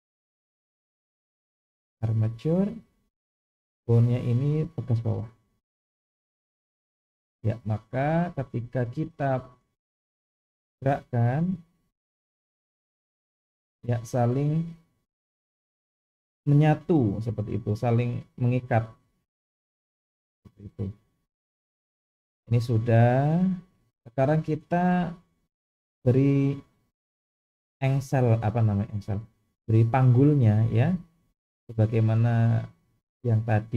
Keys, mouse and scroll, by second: 0.5 click, 3.6-5.2 drag, 6.8 click, 9.8 click, 10.7 r, 12.3 click, 12.5 r, 20.7-21.3 scroll down 1, 21.3 scroll down 1, 22.7-23.7 middle drag, 25.0 KP_1, 26.7-27.1 shift+middle drag, 27.7-28.0 scroll up 2.